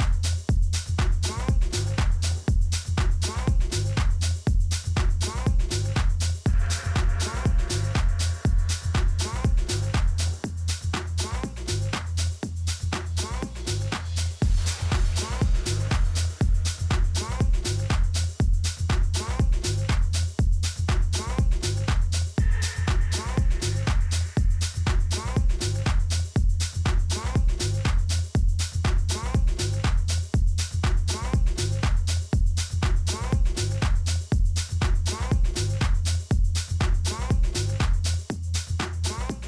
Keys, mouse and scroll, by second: 0.0-0.8 typing, 2.0-3.9 drag, 2.5 a, 2.8 a, 3.7 b, 5.6 s, 10.9-12.8 drag, 16.3 Tab, 17.4-19.3 drag, 21.6-23.6 middle drag, 22.4 Tab, 22.9 a, 23.6 a, 23.9 a, 25.4 b, 27.5 e, 29.9 s, 35.7 e, 37.8 s.